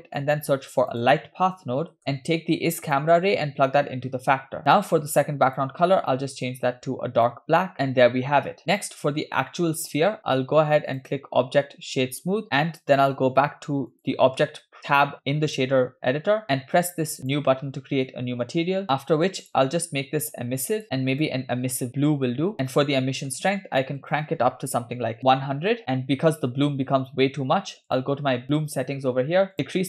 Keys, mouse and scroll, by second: 0.0 middle click, 0.4 shift+a, 3.0-4.6 drag, 4.6 middle click, 4.6-5.4 scroll up 3, 5.5 click, 7.9 middle click, 7.9-8.6 scroll down 2, 8.7 click, 10.9-12.4 drag, 13.0-14.1 drag, 16.4 ctrl+z, 17.2 click, 19.4 middle click, 19.4 scroll down 2, 19.4 click, 22.5-23.0 scroll up 2, 23.1 shift+middle click, 24.0-25.3 drag, 25.3 0, 27.9 click, 29.5 click.